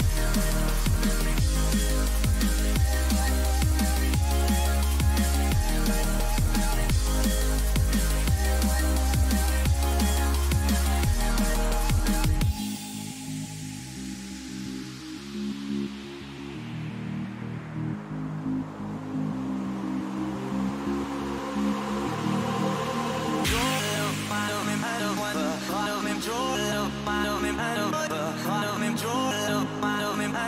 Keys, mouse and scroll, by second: 8.0 Delete, 11.7-14.5 middle drag, 14.5-16.7 right drag, 15.5 a, 16.7-18.7 drag, 17.6-21.3 right drag, 20.6 click, 21.3-22.6 middle drag, 22.6 e, 27.7-29.3 middle drag, 29.8-30.4 drag.